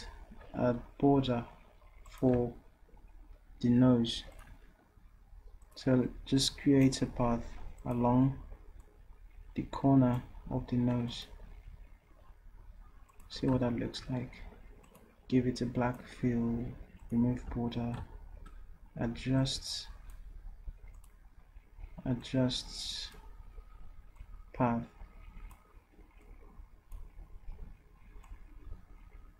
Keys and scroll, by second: 11.6 d, 17.5 d.